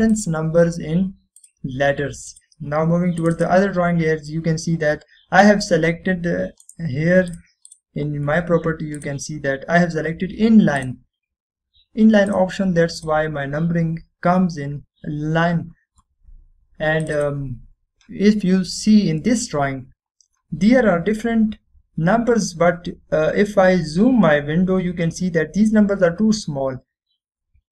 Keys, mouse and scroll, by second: 0.0 click, 2.5 click, 2.5 typing, 3.4 click, 5.5-6.3 scroll up 1, 6.3-6.6 scroll down 1, 6.6-6.9 scroll up 1, 7.8 right click, 8.4 click, 18.4 click, 21.2-22.3 scroll down 1, 22.3-23.5 scroll up 1, 27.1 scroll down 1.